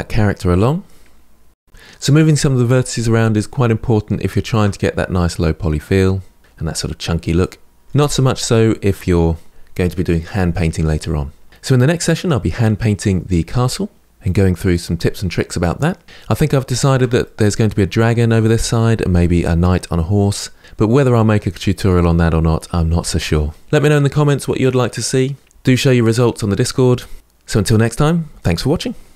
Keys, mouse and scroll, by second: 0.0 middle click, 0.1 scroll up 3, 0.2 Tab, 0.2 middle click, 0.3 click, 0.8 middle click, 0.9 click, 0.9 g, 1.0 click, 1.1 g, 1.1 middle click, 1.3 g, 1.5 Tab, 1.5 middle click, 3.5-4.0 scroll up 2, 4.0-6.6 shift+middle drag, 6.6-7.2 scroll down 3, 7.2-9.5 middle drag, 16.1-20.0 shift+middle drag.